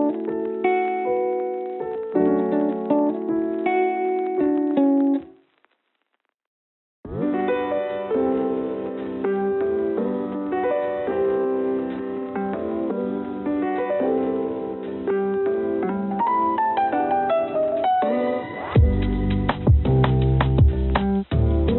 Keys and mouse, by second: 5.3 g, 18.9-19.5 drag.